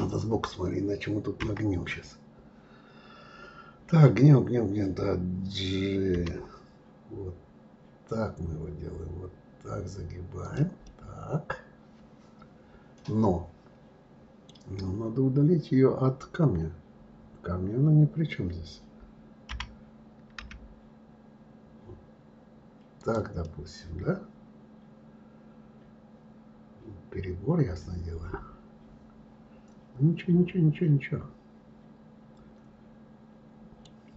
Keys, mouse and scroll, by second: 1.4 KP_1, 10.8-13.9 middle drag, 23.4-26.4 middle drag.